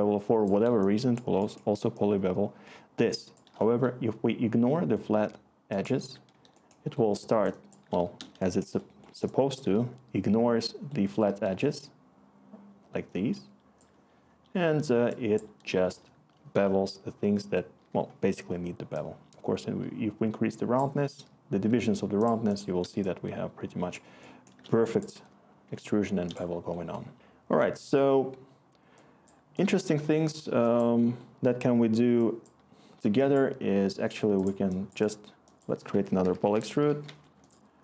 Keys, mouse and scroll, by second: 23.6-25.0 scroll, 25.6 Return, 35.9 Tab, 36.3-37.3 typing.